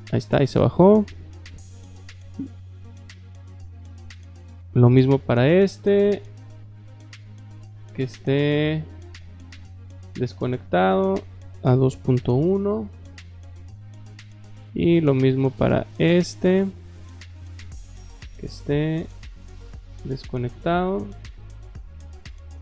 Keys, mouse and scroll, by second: 2.2 click, 4.4 click, 6.4 click, 7.1 click, 9.6 click, 10.3 click, 10.8 click, 13.8 middle drag, 14.3 middle click, 14.9 middle click, 16.1 click, 18.2 click, 18.7 click, 19.7 click, 21.3 click, 21.9 click.